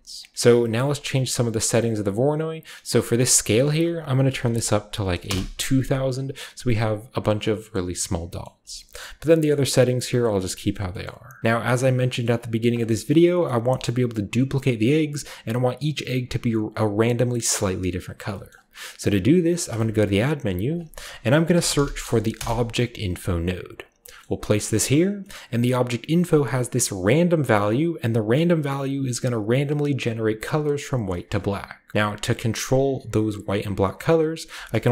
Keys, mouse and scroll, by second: 0.2 click, 0.3 middle click, 0.7 scroll up 1, 0.9 middle click, 1.7 drag, 1.7-3.1 scroll up 1, 3.1 click, 4.2-4.9 typing, 5.3 Return, 6.8 click, 7.5-8.3 typing, 7.6 middle click, 8.4 middle click, 8.8-9.4 scroll up 1, 8.9 middle click, 9.5-10.6 middle drag, 9.5-10.6 scroll up 1, 10.7 middle click, 11.0-12.1 middle drag, 11.4 ctrl+w, 11.4-12.1 shift+scroll up 1, 12.2-12.7 shift+middle drag, 12.2 shift+scroll up 1, 12.5-13.6 drag, 13.6 middle click, 13.6-15.1 scroll down 1, 13.8-17.0 shift+middle drag, 15.1-17.0 scroll down 1, 17.0-18.3 scroll up 1, 18.3-18.8 scroll up 1, 18.5 middle click, 18.8 middle click, 19.0-20.7 middle drag, 19.7 shift+a, 20.7 shift+click, 21.5 typing, 22.4 Return, 23.8 drag, 24.2 middle click, 24.2-25.2 scroll up 1, 24.6 drag, 24.8-25.6 typing, 25.1-28.3 middle drag, 28.4 click, 31.3-33.8 middle drag, 34.0 middle click, 34.6-34.9 typing, 34.8 click.